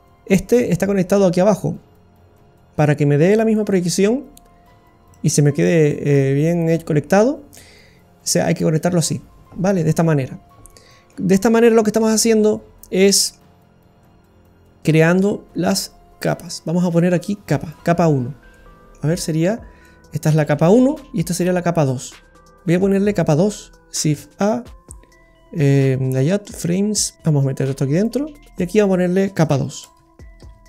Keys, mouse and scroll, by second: 1.6-2.9 scroll down 7, 2.3 middle click, 3.3 click, 5.1 click, 9.5-10.9 scroll up 2, 9.9 middle click, 11.4-11.7 scroll down 3, 11.7 middle click, 12.2-12.9 scroll up 6, 12.9 scroll down 1, 13.0 middle click, 14.6 click, 15.2 click, 16.6 click, 18.1 scroll down 2, 18.5 middle click, 20.0 middle click, 22.1 scroll down 2, 22.4 middle click, 24.1 shift+a, 27.1-28.5 click.